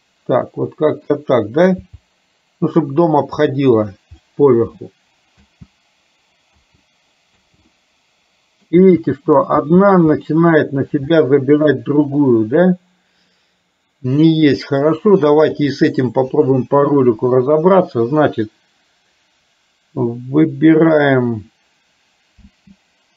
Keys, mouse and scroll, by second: 2.0 g, 4.3-5.4 middle drag, 6.5 space, 7.5 space, 7.7 middle click, 8.9 space, 9.8 space, 10.4 middle click, 11.3 shift+middle click, 15.8 click, 22.6 space.